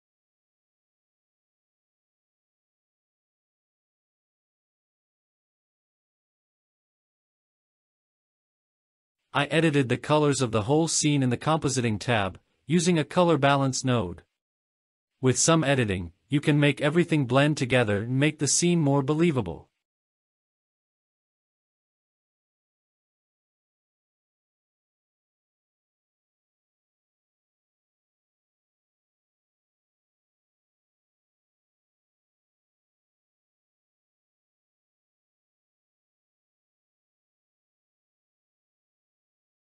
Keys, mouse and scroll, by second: 1.5 scroll up 1, 2.7 click, 3.5-3.8 scroll down 2, 3.9-4.6 middle drag, 5.9 click, 6.3 scroll down 2, 6.5 middle click, 7.3 click, 7.8-8.2 middle drag, 9.0 click, 10.7-11.2 drag, 11.8 g, 13.4 shift+right click, 16.2 shift+a, 19.6 Down, 19.8 Down, 25.3-27.0 scroll up 3, 27.0 middle click, 27.9 scroll up 1, 28.2 click, 29.0 click, 29.4 click, 30.3 click, 31.1 click, 31.8-32.3 scroll down 6, 32.7 click, 32.9 scroll up 2, 33.0 click, 33.9 click, 35.1 KP_0, 35.6 click, 35.9 middle click, 35.9 scroll down 2, 36.2-36.7 scroll up 6, 36.3 middle click, 36.6 click, 37.9-38.4 scroll down 5, 38.2 middle click, 38.4 middle click, 38.7 click, 38.9 click, 39.1-39.5 scroll down 2, 39.1 middle click, 39.5 middle click.